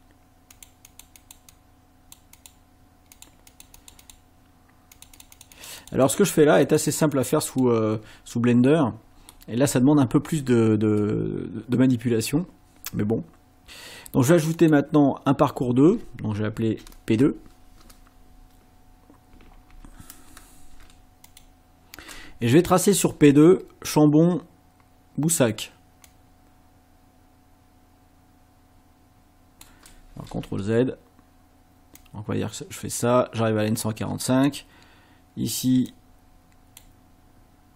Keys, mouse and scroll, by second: 0.5 click, 0.9 click, 2.4 click, 3.2 click, 3.5 click, 5.0-6.3 drag, 6.7 click, 8.7 middle click, 9.9 ctrl+scroll down 2, 14.6 click, 19.3 p, 19.7 2, 21.3 click, 26.1-29.8 drag, 30.4 ctrl+z, 32.0-34.6 drag, 35.9 shift+click.